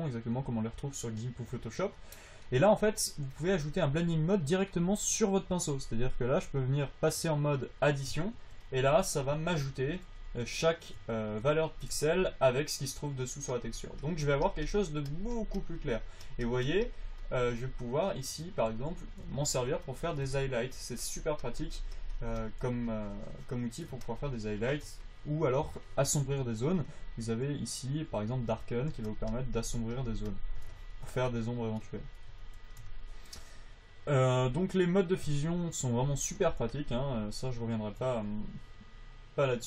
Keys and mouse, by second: 8.7 f, 9.7 f, 11.1-18.3 drag, 19.0 f, 21.1-25.1 drag, 25.5-29.1 drag, 29.4-32.4 drag, 37.1-39.6 drag.